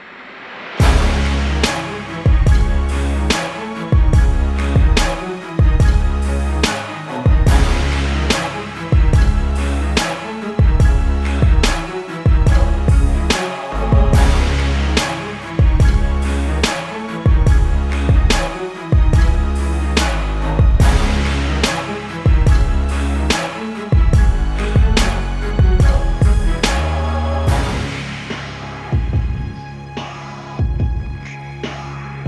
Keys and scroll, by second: 16.3 z, 26.3 z, 28.8 z.